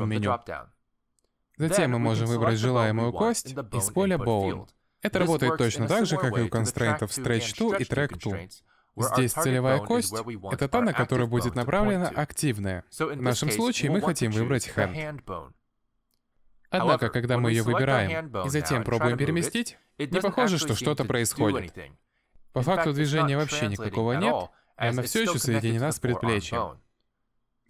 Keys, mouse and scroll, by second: 3.3 click, 16.0 middle click, 18.9 middle click, 19.9 click, 20.5 g.